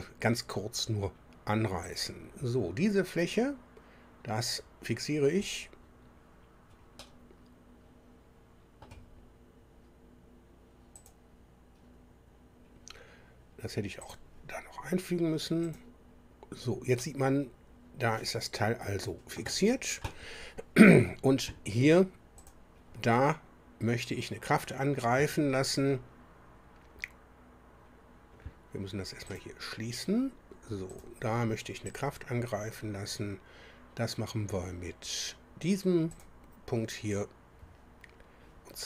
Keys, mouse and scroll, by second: 1.8 click, 5.4 click, 6.9-9.0 middle drag, 10.9 click, 14.0 click, 15.6 click, 16.9-19.5 middle drag, 22.4 click, 29.3 click, 30.9 click, 31.9 click, 36.1 click.